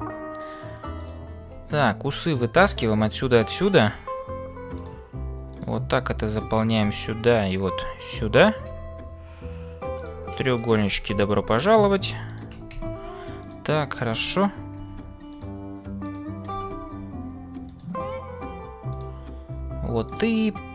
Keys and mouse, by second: 0.0-20.7 typing, 6.2 click, 7.4 click, 10.0 click, 10.5 shift+click, 11.5 click, 12.2 shift+click, 13.4 click, 20.0 click.